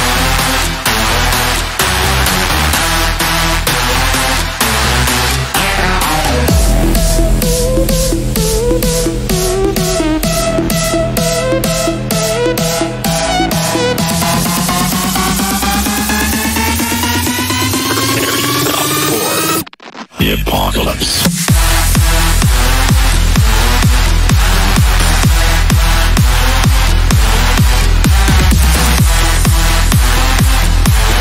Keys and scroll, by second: 4.1 Down, 30.3 Delete.